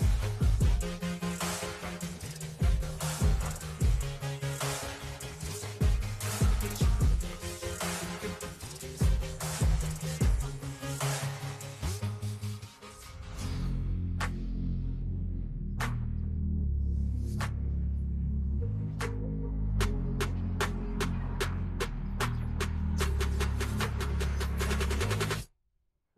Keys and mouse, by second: 1.1 click, 2.4 click, 4.8 click, 7.3 click, 9.7 click, 10.5 BackSpace, 11.7 click, 12.0 BackSpace, 15.3 click, 15.9 ctrl+h, 18.3 click, 20.3 click, 21.0 BackSpace, 22.6 click, 23.1 BackSpace, 24.5 Tab.